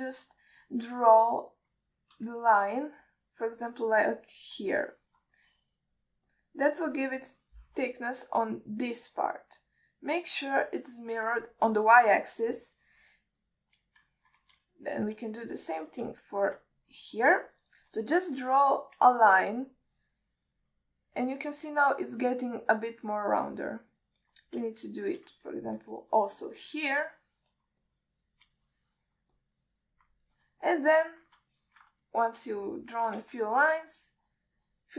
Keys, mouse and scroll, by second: 1.4 shift+middle click, 1.9 click, 4.4 click, 5.1 click, 6.1 shift+middle click, 6.6 click, 7.6 click, 8.5 alt+shift+middle click, 9.4 click, 10.2 click, 11.2-12.5 middle drag, 14.8-15.1 shift+middle drag, 15.4 ctrl+alt+middle click, 16.1 shift+click, 16.8 click, 17.6 shift+middle click, 18.1 click, 18.8 alt+shift+middle click, 19.5 click, 20.4 alt+shift+middle click, 21.1 click, 22.3-24.9 alt+middle drag, 25.3-25.6 alt+middle drag, 26.1 alt+shift+middle click, 26.7 alt+middle click, 27.3 ctrl+alt+middle click, 27.8 click, 28.4 alt+shift+middle click, 29.1 click, 29.9 alt+shift+middle click, 30.6 click, 31.9 middle click, 32.8 ctrl+alt+middle click, 33.3 middle click, 33.9 alt+shift+middle click, 34.8 ctrl+middle click.